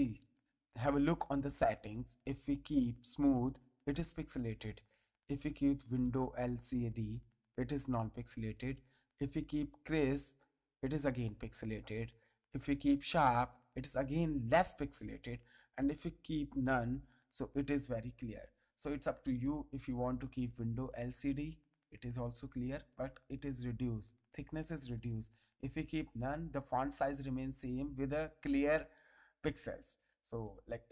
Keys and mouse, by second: 0.2 click, 3.2 click, 4.6 click, 6.0 click, 8.6 click, 10.1 click, 11.5 click, 12.7 click, 15.0 click, 19.3 click, 20.9 click, 24.9 click, 28.8 ctrl+space, 28.9 ctrl+click, 30.0 ctrl+space, 30.4 click.